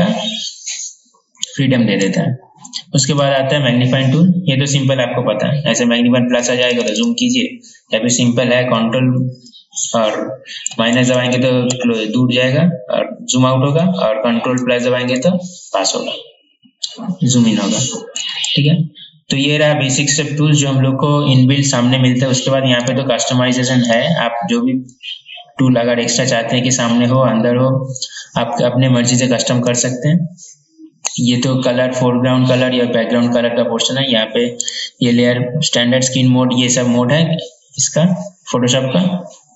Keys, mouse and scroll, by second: 23.0 right click, 24.0 click, 26.2-26.8 scroll down 1, 29.8 click, 34.8 right click.